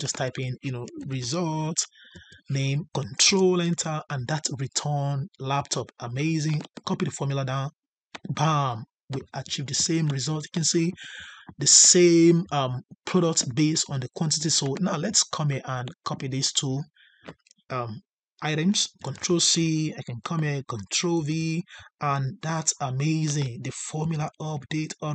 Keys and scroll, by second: 3.2 ctrl+Return, 18.9 ctrl+c, 21.1 ctrl+v.